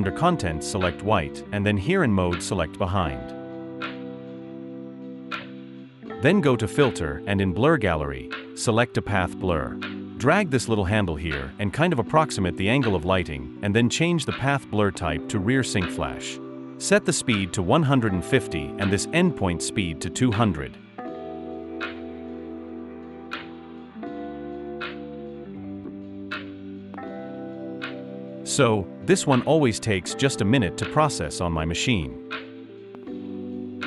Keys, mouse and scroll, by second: 18.5-19.6 typing, 21.5-23.6 typing.